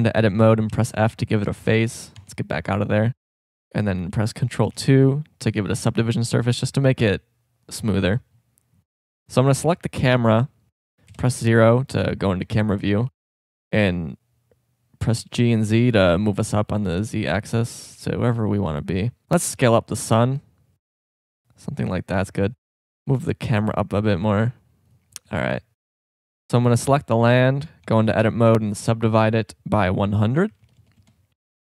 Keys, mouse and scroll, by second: 0.7 f, 2.2 Tab, 4.6 ctrl+2, 10.5 right click, 11.1 KP_0, 13.1 g, 20.2 s, 22.7 right click, 22.8 g, 27.8 Tab, 30.8 KP_0.